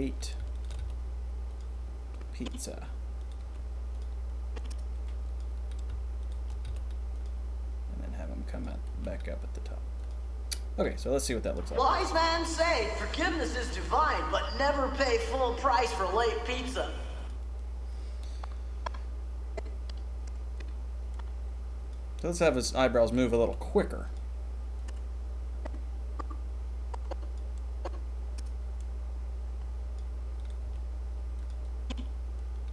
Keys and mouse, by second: 0.7 g, 2.1-2.5 drag, 3.1 click, 3.3 g, 4.5-5.3 drag, 6.1 shift+click, 6.6 g, 8.4 click, 9.0 g, 9.9 click, 17.1 click, 18.2-18.6 drag, 21.1 click, 21.9-23.0 middle drag, 23.0 click, 23.1-24.7 middle drag, 23.3 g, 24.7-25.1 drag, 27.3-27.8 middle drag, 28.2-29.9 drag, 30.3 click, 30.5 g, 31.6-32.7 drag.